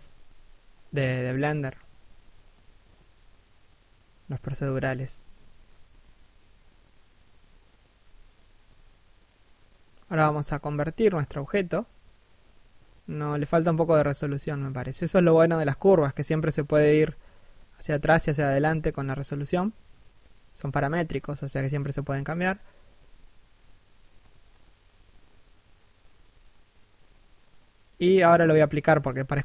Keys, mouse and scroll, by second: 2.5 g, 4.5 right click, 4.6 g, 5.3 7, 5.6 g, 6.4 alt+s, 7.0 g, 7.5 3, 7.7 KP_1, 9.1 right click, 10.1 g, 10.6 right click, 10.8 alt+s, 11.3 g, 15.8 z, 16.3 middle click, 17.5 1, 28.0 z, 28.8 z.